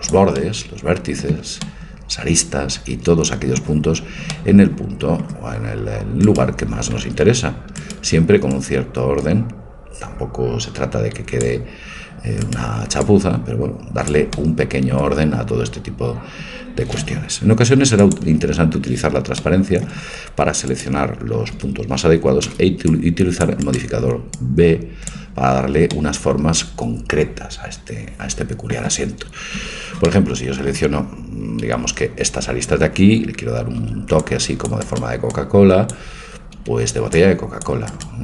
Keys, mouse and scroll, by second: 0.4 right click, 1.0-3.5 middle drag, 4.3-6.3 middle drag, 6.3-9.6 right drag, 8.7-10.3 drag, 12.5 right click, 13.0 click, 13.9 click, 13.9 right click, 14.3-16.9 middle drag, 18.0-20.0 drag, 19.5 middle click, 20.9 click, 20.9 middle click, 21.3 a, 22.3 click, 22.5 c, 24.3-26.0 drag, 29.6 a, 30.1-32.8 middle drag, 33.8 c, 35.3-37.2 drag, 36.4 a, 36.7 c.